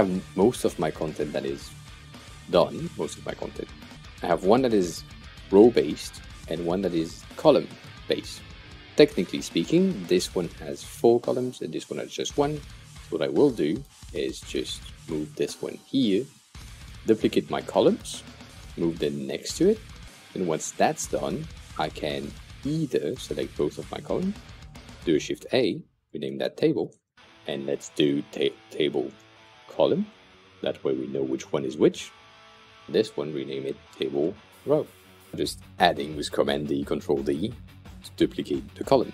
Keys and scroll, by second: 2.1 super+\, 24.9 shift+a, 25.8 super+r, 26.0-27.5 typing, 28.7-30.7 typing, 32.8 super+r, 33.0 Right, 33.8-35.1 typing, 35.3 super+d.